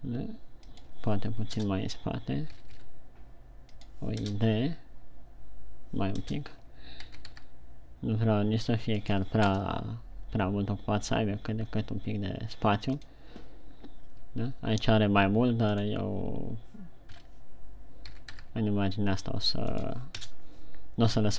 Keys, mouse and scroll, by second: 1.2 click, 2.0 KP_0, 3.0 g, 4.3 click, 4.7 KP_0, 6.7 KP_0, 7.3 g, 9.4 click, 9.9 KP_0, 17.5 KP_3, 18.4 g, 20.1 click, 20.6 KP_0.